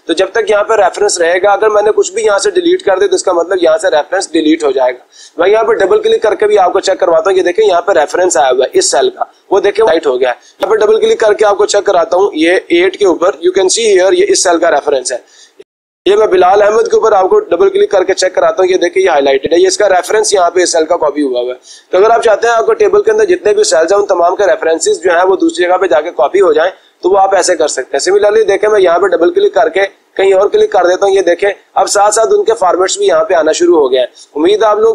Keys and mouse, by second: 5.6 click, 5.9 click, 10.6 click, 10.8 click, 11.9 click, 12.1 click, 13.1 click, 13.4 click, 16.3 click, 16.6 click, 21.3 click, 21.7 click, 24.9 click, 28.3 click, 28.7 click, 30.1 click.